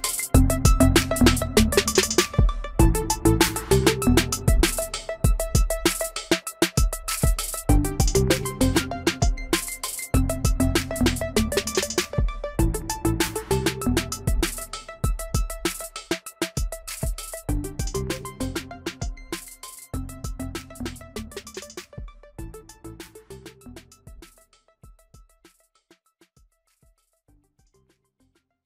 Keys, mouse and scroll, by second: 2.7 shift+middle click, 6.2 shift+middle click, 8.2 shift+middle click, 8.8 space, 10.2 Delete, 15.9 ctrl+z, 20.1 e.